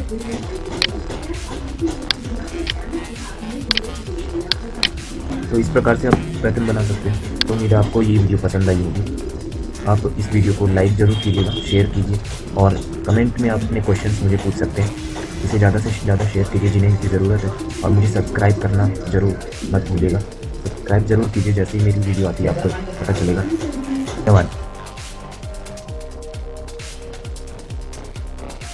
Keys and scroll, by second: 5.1 F9, 23.5 F9.